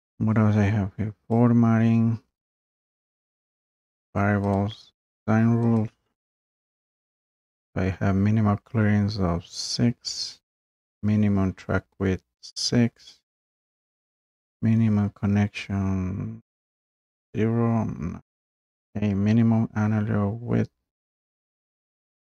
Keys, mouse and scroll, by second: 1.3 click, 3.2 click, 4.5 click, 5.8 click, 9.8-10.8 drag.